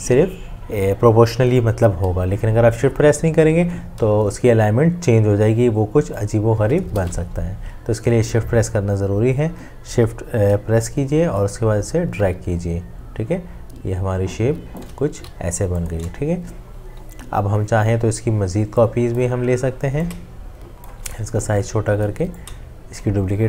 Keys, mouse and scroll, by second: 7.0 ctrl+z, 12.3 shift+click, 15.5 ctrl+z, 15.5 v, 20.2-22.2 shift+drag.